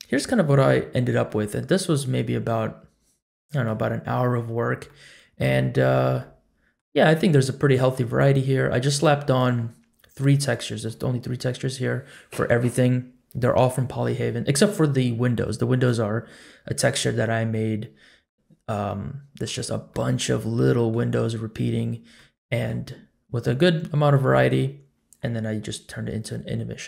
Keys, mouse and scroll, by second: 0.0-0.8 scroll down 1, 0.8 scroll up 2, 1.2-1.9 middle drag, 2.2-3.6 middle drag, 4.8-5.4 middle drag, 5.8 scroll up 1, 6.2-6.8 middle drag, 7.0-7.8 scroll up 2, 7.3-7.9 middle drag, 8.2 scroll up 1, 8.7 scroll down 1, 9.0 middle click, 17.6-18.2 middle drag, 18.5-18.9 scroll up 2, 18.9-19.4 middle drag, 19.9-20.9 middle drag, 22.1-22.7 middle drag, 22.1-22.7 scroll down 1, 23.0 scroll up 1.